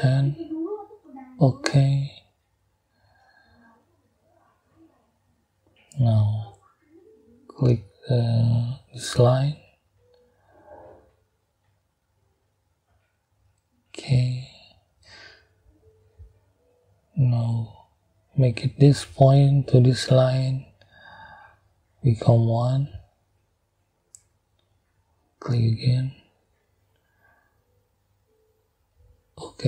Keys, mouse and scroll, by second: 1.5 click, 2.4 click, 7.4 click, 11.6 click, 14.4 click, 15.8 right click, 18.8 click, 19.9 click, 23.6 click, 25.2 click, 26.5 click, 28.9 click.